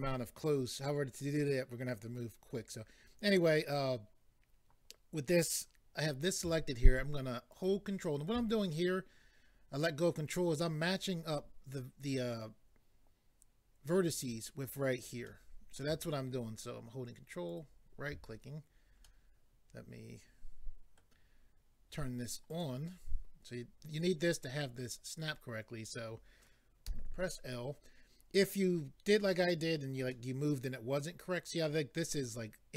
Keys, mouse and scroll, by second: 7.5 ctrl+right click, 15.3 middle click, 17.5 ctrl+right click, 19.0 middle click, 22.5 click, 26.9 l.